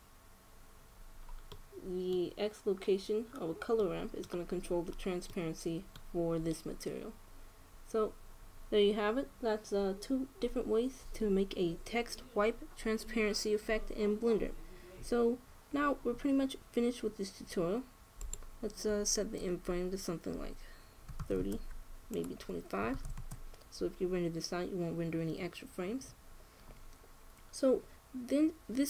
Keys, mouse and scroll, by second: 2.1-4.0 middle drag, 4.5 middle click, 7.8 middle click, 18.9-20.7 drag, 22.8-24.5 drag.